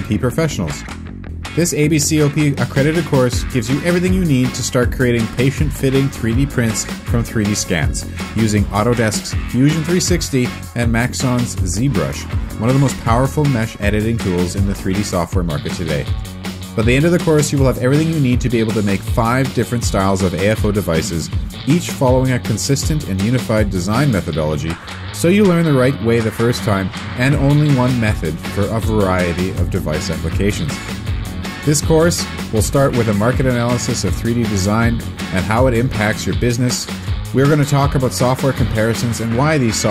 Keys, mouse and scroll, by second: 0.2 scroll down 1, 0.3 click, 1.0 z, 1.1 middle click, 1.1 scroll up 1, 1.4 click, 1.7 alt+space, 1.8 alt+space, 3.3 space, 6.5 space, 7.4 alt+w, 8.2 5, 11.2 shift+p, 11.4 Up, 16.5 ctrl+space, 16.8 ctrl+space, 19.6 ctrl+space, 22.9 alt+Tab, 24.5 v, 26.2 3, 26.2 Return.